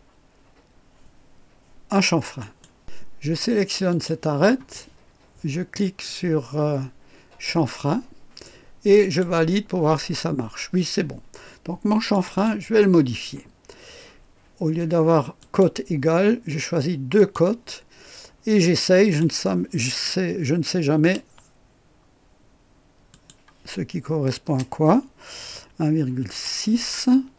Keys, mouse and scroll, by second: 2.4 right click, 3.9 click, 7.5 click, 9.0 click, 12.1 click, 15.4 click, 17.2 click, 18.6 click, 21.0 KP_4, 23.1 click, 24.4 BackSpace, 26.3 KP_6.